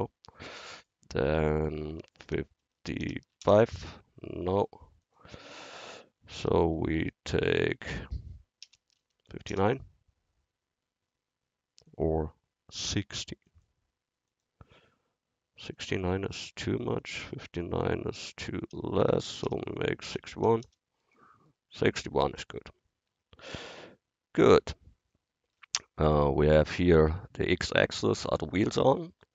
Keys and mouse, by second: 0.7-3.1 drag, 5.1-7.1 drag, 11.9-18.5 drag, 19.5 BackSpace, 25.6-28.5 drag.